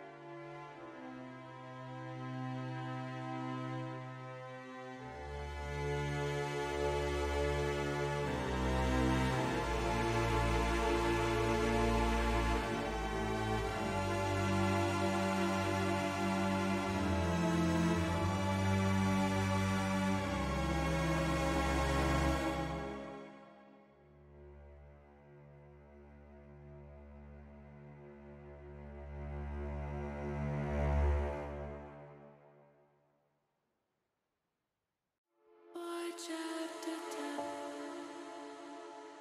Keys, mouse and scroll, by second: 0.2 click, 0.7 ctrl+r, 1.2 click, 1.7 ctrl+r, 2.8 click, 4.9 shift+middle click, 5.4 middle click, 6.4 click, 8.1 click, 9.2 shift+click, 9.7 shift+click, 10.1 shift+click, 10.4 shift+click, 11.3 shift+click, 12.0 shift+click, 12.3 shift+click, 12.8 shift+click, 13.5 shift+click, 14.2 shift+click, 14.8 middle click, 15.8 middle click, 19.7 s, 20.0 x, 22.7 click, 23.8 click, 25.2 middle click, 26.3 click, 27.2 scroll up 1, 27.3 middle click, 28.4 shift+scroll up 1, 28.5 shift+middle click, 28.9 scroll up 1, 29.1 middle click, 29.7 scroll up 1, 29.8 middle click, 30.8 scroll up 1, 31.0 shift+middle click, 32.9 alt+shift+s, 34.5 click, 35.5 alt+shift+s, 36.7 click, 38.4-39.2 drag.